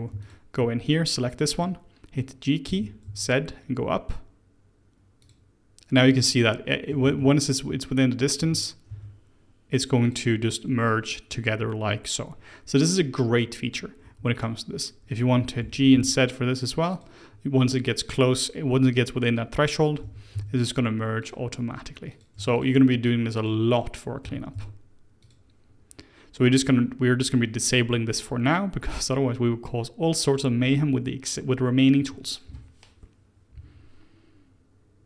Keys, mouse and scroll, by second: 0.1 alt+click, 1.1 scroll up 1, 1.3-2.6 middle drag, 2.6 g, 7.0 ctrl+z, 8.3 g, 13.9 1, 14.3 click, 15.5 g, 17.8 click, 19.9 g, 22.0 click, 22.5 shift+click, 23.3 click, 24.2 g, 27.6 click, 28.9-30.6 scroll down 2, 30.6-32.0 scroll down 1.